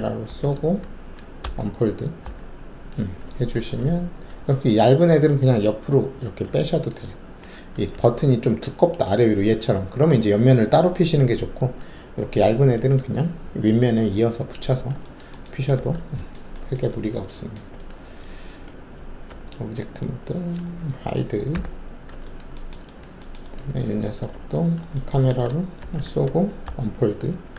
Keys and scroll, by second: 0.2 ctrl+alt+shift+c, 1.4 d, 2.2 d, 15.7 alt+w, 19.3 alt+`, 21.5 h, 25.8 ctrl+alt+shift+c, 26.6 d.